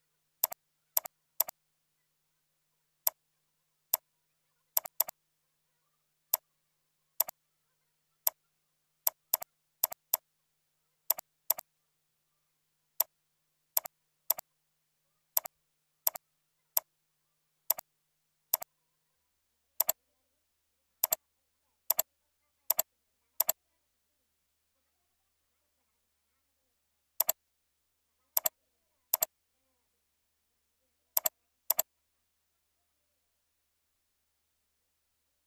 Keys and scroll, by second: 4.5 ctrl+c, 5.1 ctrl+a, 5.6 ctrl+v, 8.8 ctrl+b, 14.1 ctrl+c, 14.6 ctrl+a, 15.0 ctrl+v, 16.5 ctrl+v, 19.2 ctrl+e, 25.4 ctrl+Left, 26.2 ctrl+Down.